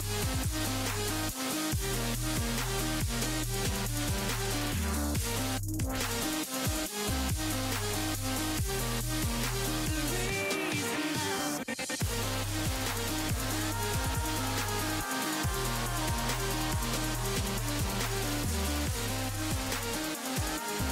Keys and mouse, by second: 0.4 ctrl+z, 2.0-3.4 drag, 9.7 f, 11.0-13.0 drag, 17.7-20.0 drag, 20.0 middle click, 20.4-20.9 drag.